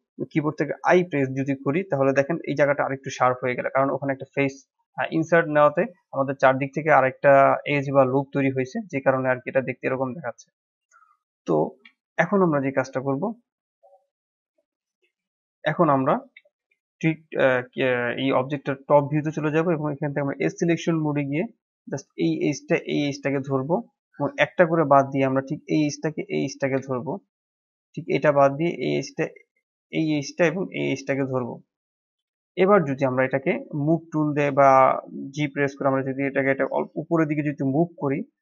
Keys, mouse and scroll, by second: 1.9 shift+z, 2.4 middle click, 3.2 Tab, 3.6-7.5 middle drag, 7.5-7.9 scroll down 1, 7.9-9.9 middle drag, 9.9 Tab, 10.8 middle click, 11.5 scroll up 3, 11.9 shift+middle click, 12.5-12.9 scroll down 2, 12.9-16.5 middle drag, 16.5 KP_7, 17.5-19.7 shift+middle drag, 19.7 click, 20.1-20.5 scroll up 2, 20.5 shift+middle click, 20.9 scroll up 1, 21.9-23.2 drag, 23.2-23.6 scroll down 4, 23.6 shift+middle click, 24.3 scroll up 3, 24.6 shift+middle click, 25.5 shift+click, 26.9-29.8 shift+middle drag, 29.8 shift+click, 30.9 shift+click, 31.3 scroll down 3, 31.6-32.7 middle drag, 32.7 scroll up 2, 33.8-37.0 drag.